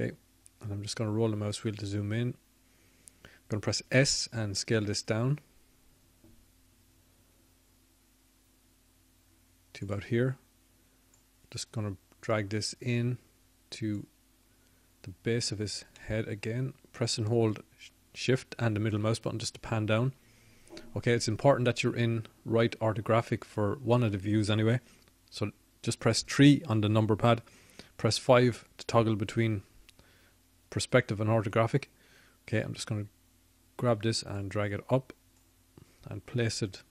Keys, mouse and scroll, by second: 10.0 s, 17.1-18.8 drag, 21.5 middle click, 22.6 middle click, 22.8 middle click, 30.8 KP_3, 33.7 KP_5, 34.4 KP_5.